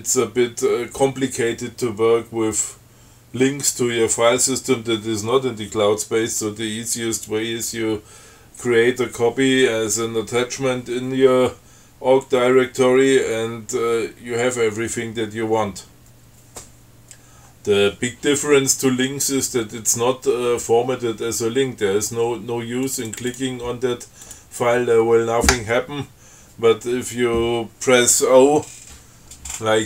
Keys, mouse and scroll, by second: 23.1 click, 24.5 click.